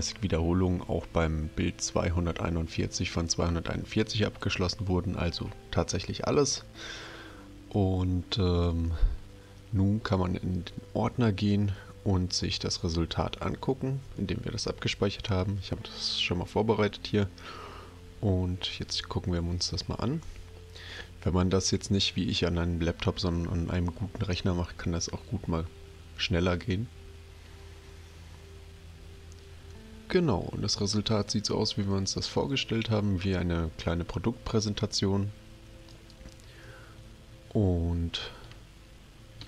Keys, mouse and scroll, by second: 15.2 click, 18.7 click, 35.8 click.